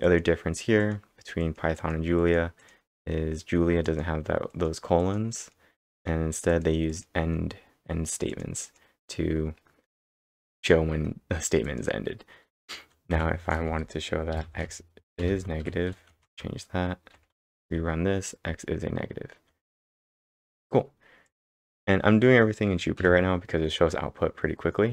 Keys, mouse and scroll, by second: 0.0 click, 0.8 click, 8.6 click, 11.4-18.0 typing, 11.6 click, 16.2 ctrl+Return, 20.3-21.3 scroll up 3, 21.3 click, 21.7 x, 23.0 b.